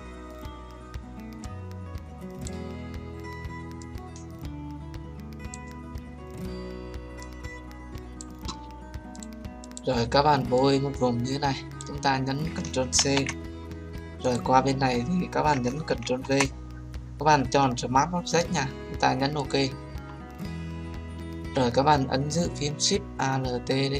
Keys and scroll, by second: 12.9 ctrl+c, 16.0 ctrl+v.